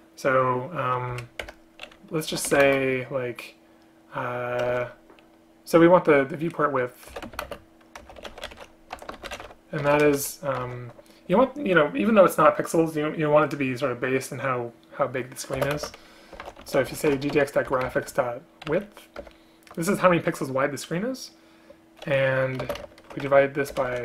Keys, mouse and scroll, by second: 1.2 Up, 1.5 Return, 2.7 space, 4.8 ctrl+BackSpace, 7.5 space, 9.9 BackSpace, 10.0 BackSpace, 10.1 BackSpace, 15.6 space, 15.8 space, 17.8 Return, 22.7 space, 22.9 space, 23.8 BackSpace.